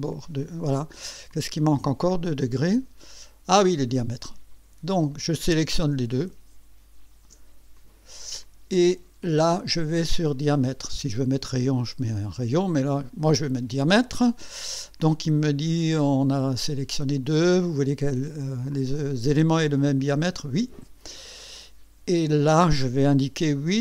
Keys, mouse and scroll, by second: 2.0 click, 4.2 click, 5.2 click, 7.8 ctrl+click, 9.9 click, 12.8 click, 20.5 click, 21.0 click, 23.7 KP_8.